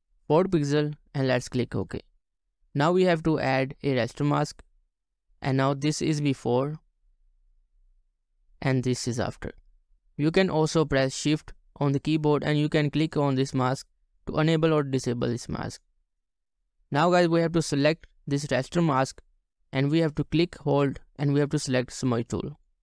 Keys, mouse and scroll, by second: 6.7 right click, 13.1 shift+click, 14.1 shift+click.